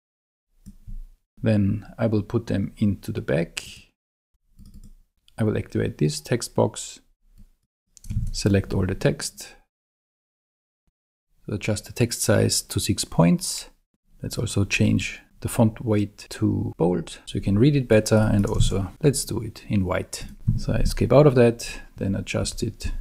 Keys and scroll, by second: 8.2 super+a, 17.2 super+z, 18.6 super+a, 20.5 Escape, 22.4 Down.